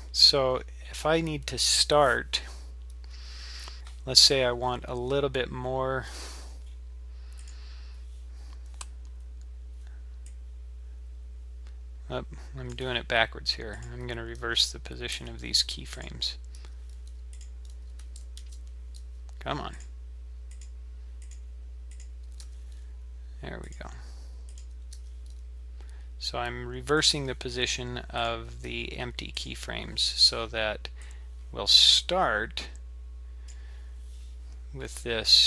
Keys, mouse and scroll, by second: 0.5-1.4 scroll up 4, 1.4-4.5 scroll down 2, 7.4 click, 10.3 click, 13.7 click, 14.4 g, 16.0 click, 16.6 g, 18.6 ctrl+z, 19.7 click, 20.5 click, 21.2 click, 21.9 click, 22.4 g, 24.5 click, 25.0 g, 28.2 click, 28.7 g, 31.0 click.